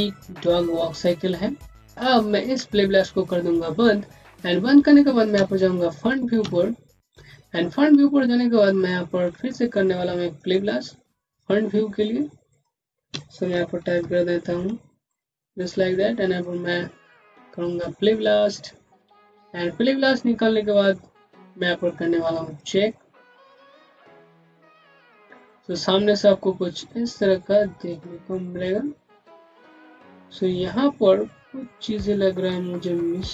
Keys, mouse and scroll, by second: 3.5 click, 5.2 space, 5.4 click, 5.7 space, 6.5 click, 6.8 space, 7.5 scroll down 1, 7.9 alt+middle click, 8.9 scroll down 1, 9.3 middle click, 10.2 right click, 11.1 click, 11.6-12.4 scroll down 1, 12.4 click, 13.0-14.4 typing, 14.9 click, 21.7 click.